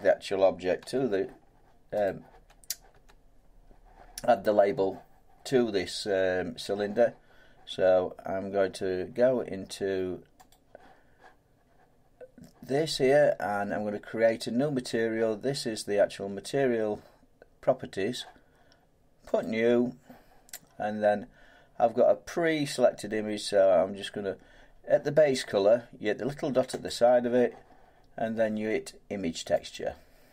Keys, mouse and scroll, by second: 0.8 Tab, 2.1 click, 2.3 Tab, 2.9 Tab, 10.5 click, 19.4 click, 26.9 click, 29.7 click.